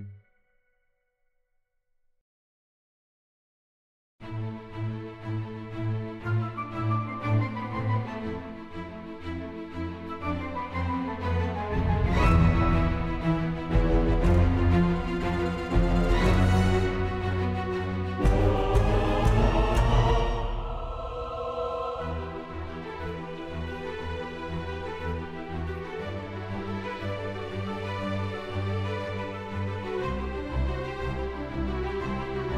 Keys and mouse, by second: 0.1 click, 0.3 shift+s, 0.9 middle click, 1.2-2.2 middle drag, 2.9 shift+middle click, 3.2 middle click, 3.4 middle click, 3.9 right click, 4.2 middle click, 4.5 shift+middle click, 5.2 shift+middle click, 5.6 shift+a, 5.7 shift+a, 6.9-8.6 drag, 8.9 click, 8.9 KP_0, 9.5 Tab, 9.8 KP_0, 10.7 click, 11.4 click, 11.6 shift+middle click, 12.2 shift+middle click, 12.3 shift+middle click, 12.8 middle click, 13.2 middle click, 13.3 middle click, 13.6 shift+middle click, 14.1 middle click, 14.9 Tab, 15.1 Tab, 15.2 click, 15.2 2, 16.5 click, 16.6 e, 16.7 z, 17.1 click, 17.5 click, 17.7 ctrl+b, 19.2 Tab, 19.3 click, 19.5 click, 19.6 right click, 20.4 middle click, 21.2 click, 21.5 alt+z, 22.3 alt+z, 22.3 click, 22.4-27.7 drag, 28.6 click, 28.9 right click, 29.8 shift+a, 31.5 click, 31.5 z, 31.9-32.5 drag.